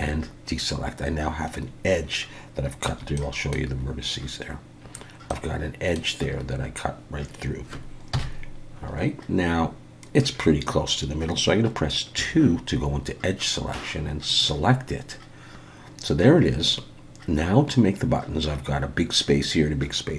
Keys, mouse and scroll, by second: 2.9 1, 3.2 middle click, 4.8-5.3 scroll down 1, 5.3 middle click, 8.1 KP_1, 8.8-9.5 scroll up 4, 9.5-10.3 scroll up 2, 10.3 scroll down 6, 10.6-11.1 scroll up 1, 12.2 2, 14.3 click.